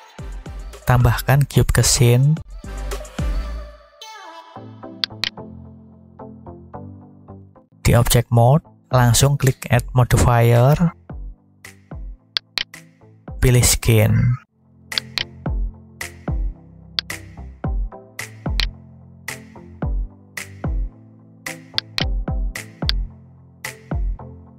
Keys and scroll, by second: 2.6 shift+a, 19.1 Tab.